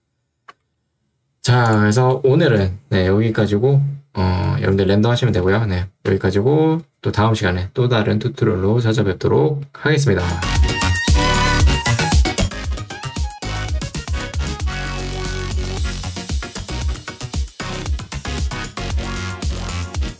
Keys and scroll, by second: 0.6 space.